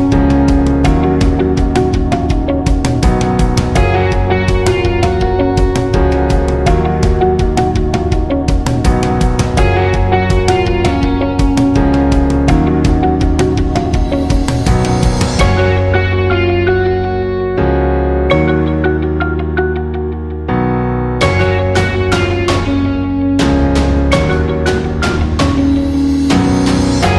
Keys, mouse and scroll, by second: 1.5 click, 6.0 right click, 7.0 click, 9.0 click, 23.6 click, 26.6-27.1 drag.